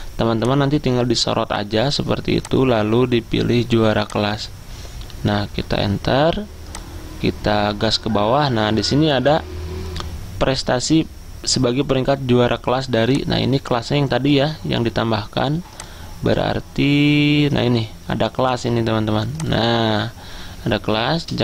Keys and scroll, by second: 5.6 Return.